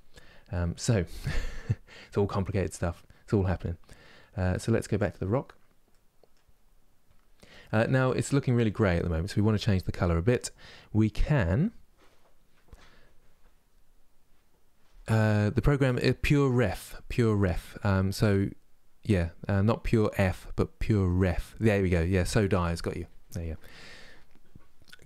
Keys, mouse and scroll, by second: 5.6 middle click, 6.2-6.8 scroll up 4, 6.8 scroll down 2, 7.2 middle click, 7.9-12.6 scroll down 1.